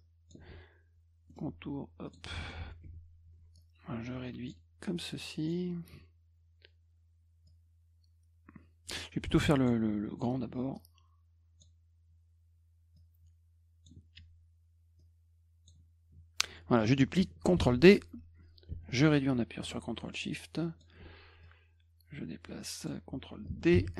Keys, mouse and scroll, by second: 1.3 middle click, 2.1 click, 2.4 middle click, 3.6-4.5 drag, 5.0 click, 7.5-9.7 drag, 10.7-11.6 drag, 13.0-13.8 drag, 15.0 click, 17.7 d, 18.9-20.8 ctrl+shift+drag, 21.4 click, 23.8 d.